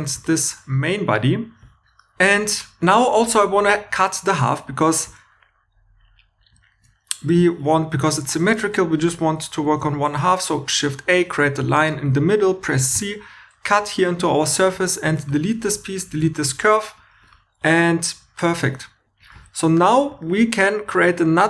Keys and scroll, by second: 9.6 shift+a, 12.9 c, 14.7 Tab, 15.0-16.5 typing.